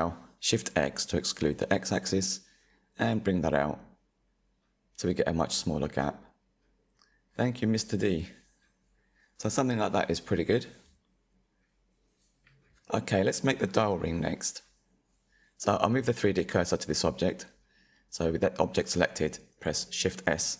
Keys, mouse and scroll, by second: 4.4 Tab, 5.7 click, 6.3 click, 6.7-7.0 scroll down 4, 7.0-9.6 middle drag, 9.6 /, 10.7 middle drag, 10.9 click, 12.5-15.5 middle drag, 15.9 shift+s, 18.5-20.0 middle drag, 20.0-20.4 scroll down 2, 20.1 shift+middle click, 20.4 shift+a.